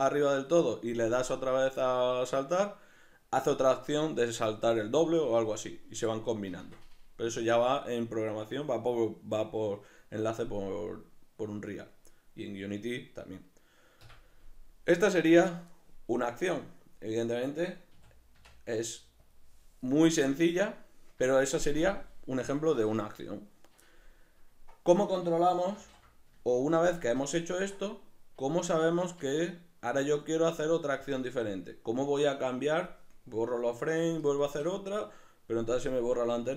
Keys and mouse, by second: 11.5-16.1 middle drag, 14.0 Escape, 16.1-36.5 drag, 17.9 a, 25.8 ctrl+z.